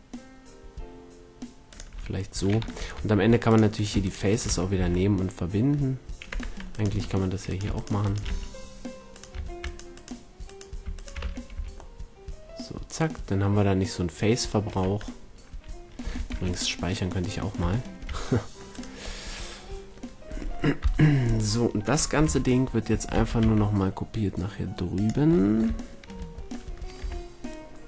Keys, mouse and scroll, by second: 2.7 ctrl+Tab, 4.4 f, 4.7 a, 6.3 Tab, 6.8 Tab, 7.7 right click, 8.2 f, 11.1 f, 11.5 a, 14.7 Tab, 16.2 ctrl+s, 17.7-19.4 drag, 20.7 KP_1, 22.1 z, 23.1 shift+d, 25.0-25.5 drag, 26.7 middle drag, 26.9 z.